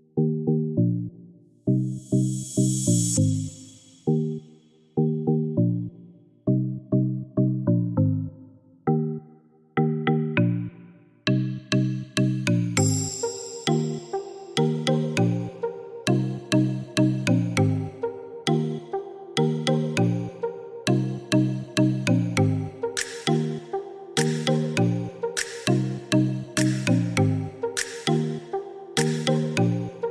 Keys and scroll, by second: 13.1 Escape, 21.4 Escape, 26.1-27.0 typing, 27.9 Escape.